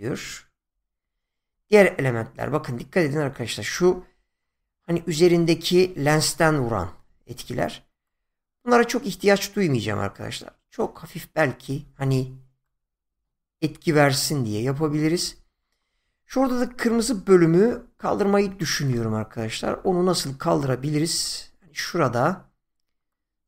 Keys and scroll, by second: 16.9 <.